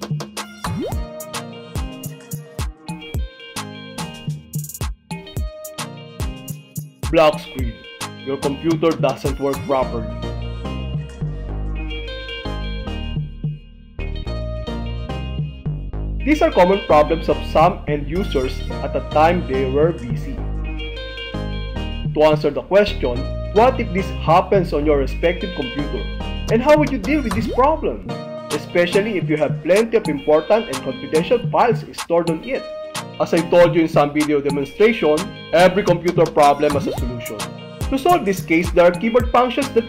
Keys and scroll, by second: 3.2 Return.